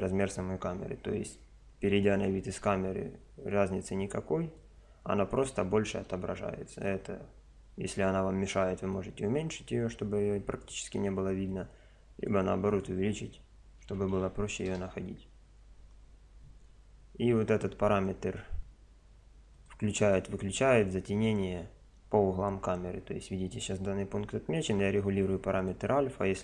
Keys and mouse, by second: 0.7 KP_0, 2.5 KP_0, 3.5 click, 5.0 KP_0, 5.9 KP_0, 9.1 click, 11.5-14.4 drag, 16.7 KP_0, 19.5 click, 24.7 click.